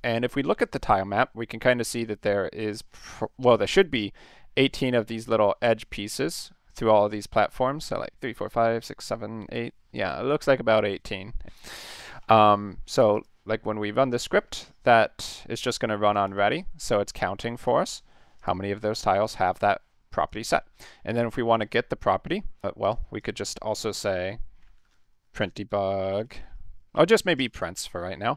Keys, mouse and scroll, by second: 0.1 middle click, 0.3 middle click, 0.7 middle click, 1.3 middle click, 1.5 middle click, 2.1 middle click, 2.7 middle click, 3.1 middle click, 3.6 middle click, 5.9-6.3 middle drag, 6.9-7.2 middle drag, 8.4 middle click, 9.2 middle click, 9.7 middle click, 10.1 middle click, 10.6 middle click, 11.0 middle click, 11.3 middle click, 11.6 middle click, 13.1 click, 16.3 click, 17.4 click, 17.8 click, 18.4 click, 18.8 click, 19.1 click, 20.2 click, 20.4 click, 21.5 click, 22.1 middle click, 22.5 middle click, 22.8 click, 23.2 click, 24.1 Return, 24.2-28.3 typing.